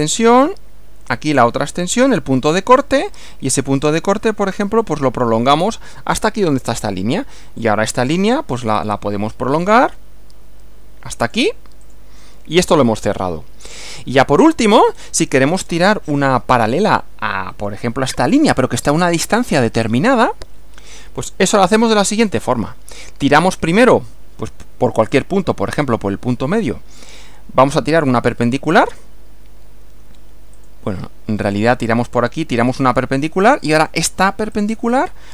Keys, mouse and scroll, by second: 2.7 click, 4.8 click, 5.7 click, 7.6 click, 8.8 click, 11.2 click, 11.8 click, 12.7-13.2 scroll down 2, 14.4 scroll down 2, 14.8-15.2 scroll up 2, 15.6 scroll down 2, 22.2 click, 25.2 click, 30.6 click, 33.2 click, 33.8 click, 34.5 click.